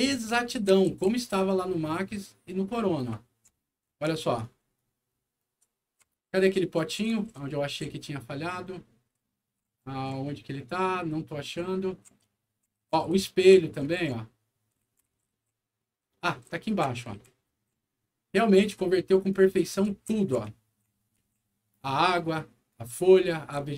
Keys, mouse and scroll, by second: 0.3 e, 0.8 s, 3.0 d, 4.0 right click, 4.7-18.6 right drag, 5.3-7.7 typing, 9.2 w, 12.5-16.4 typing, 17.4 w, 19.2-20.4 typing, 19.2-21.6 right drag, 22.6-23.7 right drag, 23.2-23.7 typing.